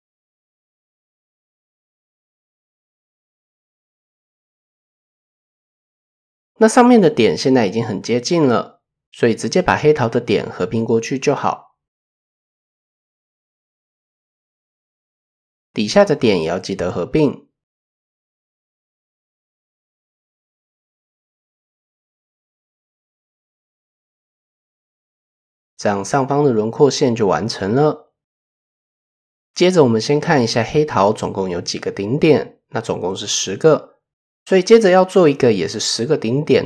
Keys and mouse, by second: 0.3 click, 0.9 KP_1, 2.0 KP_3, 3.0 shift+click, 4.3 shift+click, 5.2 shift+click, 6.6 click, 10.5 m, 12.1 shift+middle click, 13.5 shift+middle click, 13.9 a, 15.5 m, 16.9-18.4 drag, 18.9 KP_1, 19.3 KP_3, 20.1 shift+middle click, 21.5-23.1 drag, 23.4 shift+click, 24.0 KP_1, 25.0 shift+click, 25.1 shift+middle click, 28.0-28.4 middle drag, 29.4 shift+middle drag, 33.5 click, 34.6 KP_3, 35.4 shift+middle click, 36.1 shift+middle drag, 36.4 middle drag.